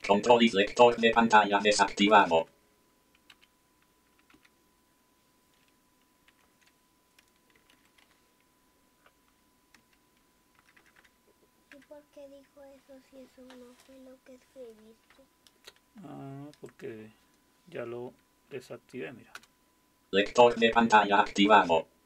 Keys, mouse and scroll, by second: 0.5 ctrl+c, 2.0 Return, 2.2 Return, 2.4 Return, 3.3 Up, 4.3 Down, 6.3 alt+super+r, 7.3-8.5 typing, 9.8-11.0 typing, 16.7 click, 18.7 Up, 19.4 Return.